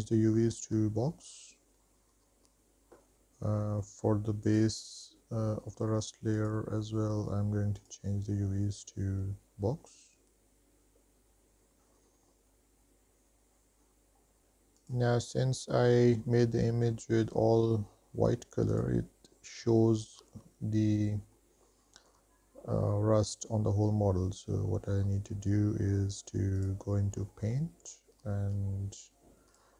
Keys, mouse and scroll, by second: 3.1 click, 4.6 click, 6.6-8.2 drag, 13.7 click, 14.0-14.5 scroll down 3, 14.4 drag, 15.2 click, 19.0 click, 20.0-20.5 shift+middle drag, 20.6-21.6 scroll down 2, 21.6-22.4 middle drag, 26.8 click, 27.6 middle click.